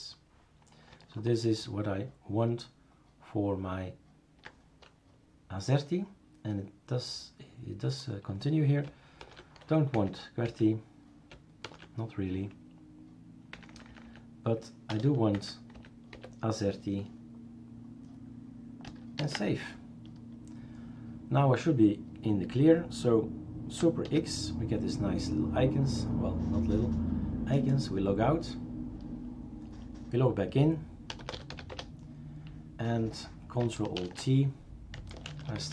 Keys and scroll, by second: 9.2 typing, 9.9 Down, 10.5 Left, 11.7 #, 13.6 Down, 13.7 Down, 13.9 Down, 14.1 Down, 14.9 BackSpace, 15.4 Down, 15.8 Down, 16.1 Delete, 19.2 ctrl+s, 24.1 super+x.